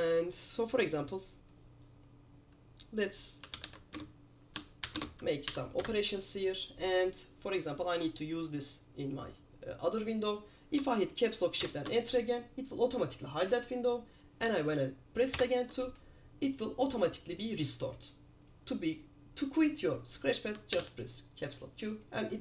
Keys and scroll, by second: 3.6-6.1 typing, 11.8 shift+super+Return, 20.9 super+q.